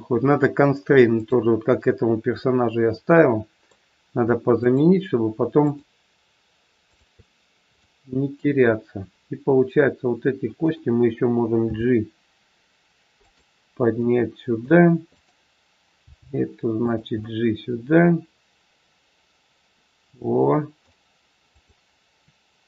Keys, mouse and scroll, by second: 1.0 click, 2.3 middle click, 4.5 shift+click, 7.3 shift+click, 7.8 middle click, 9.2 middle click, 11.5 g, 13.9 middle click, 15.1 click, 16.1 g, 17.2 middle click, 21.4 click.